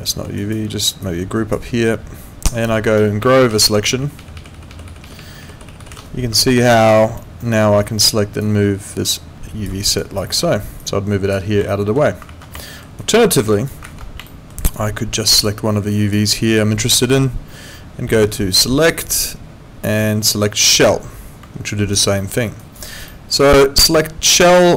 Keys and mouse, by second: 0.4 alt+right click, 1.0 click, 3.5 shift+., 6.7 alt+right click, 7.2 alt+middle click, 8.4 click, 9.8 alt+right click, 10.2 alt+middle click, 10.8 click, 11.7 alt+middle click, 12.3 ctrl+z, 12.6 alt+middle click, 13.0 alt+right click, 13.3 alt+middle click, 13.5 alt+right click, 14.3 alt+middle click, 15.4 click, 18.9 click, 20.7 click, 21.7 right click, 22.2 middle click, 22.6 right click, 23.1 middle click, 24.0 click.